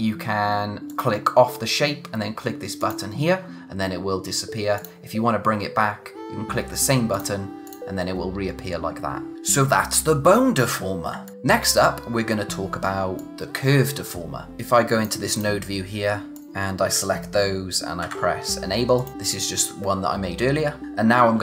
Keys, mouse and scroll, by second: 0.9 click, 2.8 click, 4.8 click, 7.1 click, 11.2 click, 12.0-12.9 scroll down 1, 12.9 space, 13.1 click, 14.5 click, 18.0 a, 18.9 click.